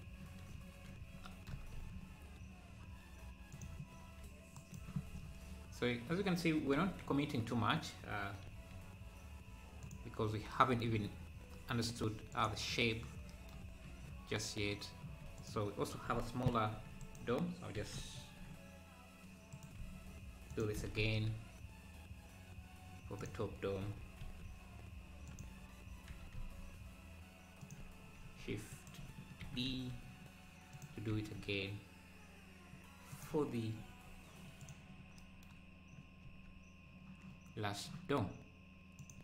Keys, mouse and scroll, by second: 1.5 g, 4.5-6.7 right drag, 6.7 w, 8.4 s, 11.1-11.6 scroll up 2, 12.0 s, 14.3 scroll down 2, 15.4 shift+click, 16.8 shift+d, 17.8 s, 19.8 s, 23.9 s, 26.1 g, 28.2 shift+s, 29.4 shift+d, 31.1 s, 33.5 scroll down 3, 33.7 `, 34.6 click, 36.3 ctrl+s.